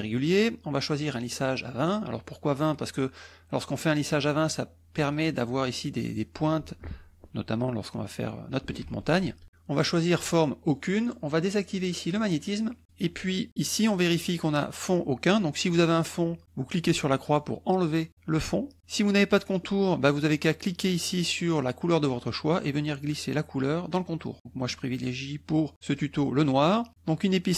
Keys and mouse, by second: 3.8-5.3 drag, 8.8 ctrl+z, 11.7 click, 12.1 click, 16.2 click, 17.2 click, 20.6-24.1 drag, 24.4-26.1 drag.